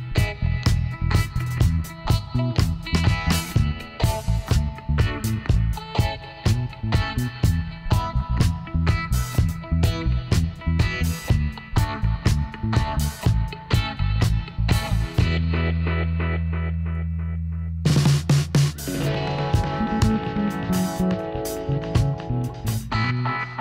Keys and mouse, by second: 0.6-4.8 middle drag, 1.7 ctrl+r, 6.7-8.5 middle drag, 9.3 g, 12.7-15.8 right drag, 14.8 s, 17.7-20.3 right drag, 20.3-23.1 middle drag, 23.1 g.